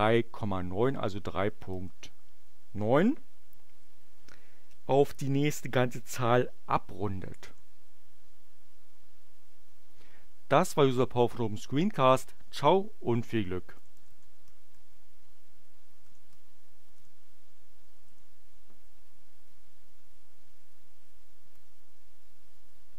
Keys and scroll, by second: 0.0 ., 1.4 9, 7.5 Return, 13.1-16.5 typing, 16.9 shift+Return, 17.8 n, 18.1 Return.